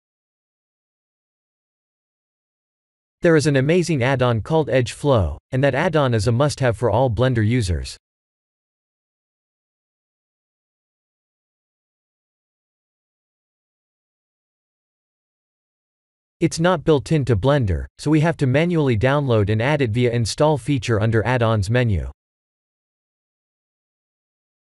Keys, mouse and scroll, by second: 2.3 KP_1, 2.6 KP_7, 4.5 shift+c, 5.9 shift+middle click, 6.5 click, 6.7 x, 7.5-8.0 scroll up 5, 8.0 shift+middle click, 8.1 shift+middle click, 9.0 shift+a, 15.1 click.